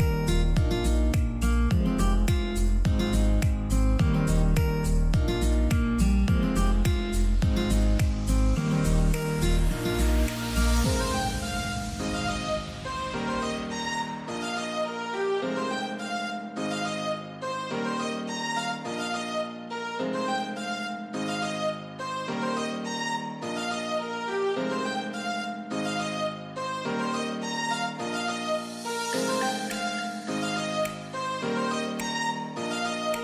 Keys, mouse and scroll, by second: 3.5 right click, 5.5-13.7 ctrl+drag, 14.9-15.2 scroll up 1, 14.9 typing, 17.0-21.3 drag, 21.3 ctrl+right click, 23.0 ctrl+d, 25.9-26.7 alt+scroll down 1, 28.5 click.